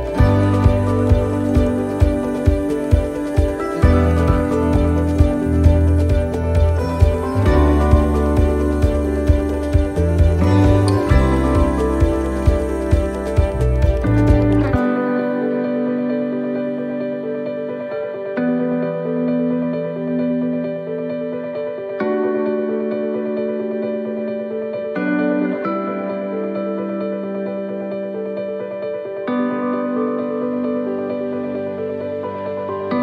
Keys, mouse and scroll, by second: 0.6 middle click, 1.8 x, 3.8 right click, 4.5 x, 6.3 right click, 6.6 x, 7.8 right click, 8.2 x, 10.4 right click, 10.7 x, 14.2 c, 15.6 x, 17.1 middle click, 18.4 scroll down 2, 18.8 middle click, 19.4 shift+middle click, 20.0 scroll up 3, 20.6 middle click, 21.3 shift+middle click, 21.6 scroll up 3, 22.0 middle click, 23.1 right click, 24.5 click, 25.4 right click, 26.7 right click, 27.5 c, 32.1 middle click.